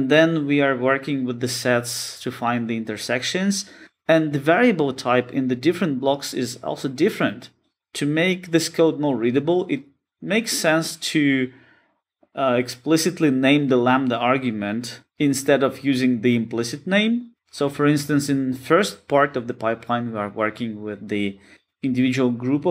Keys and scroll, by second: 21.1 shift+F6.